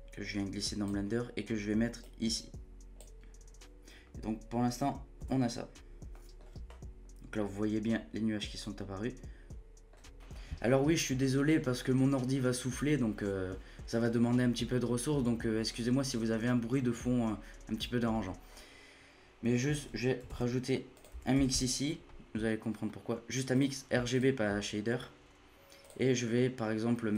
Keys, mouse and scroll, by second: 6.1 middle click, 6.4-6.7 scroll up 7, 6.7-7.4 scroll down 5, 7.4-10.2 middle drag, 10.2-11.6 scroll up 3, 11.6-12.8 scroll up 1, 12.8-13.4 scroll up 1, 18.5-19.2 scroll up 4, 19.2 scroll up 1, 19.5 shift+middle click, 20.3 shift+a, 24.9-25.6 scroll up 7, 25.6 scroll up 1, 25.8-27.1 drag.